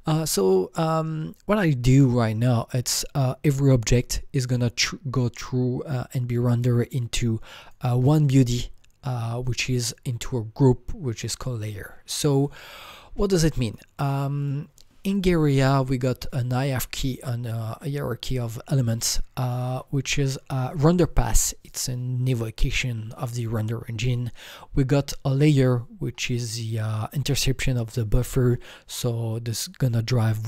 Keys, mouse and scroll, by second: 3.9 click, 4.0 click, 7.6 click, 9.4 click, 12.3 click, 12.3 click, 13.6 click, 14.4 click, 14.5 click, 16.3 click, 17.1 Right, 18.2 Right.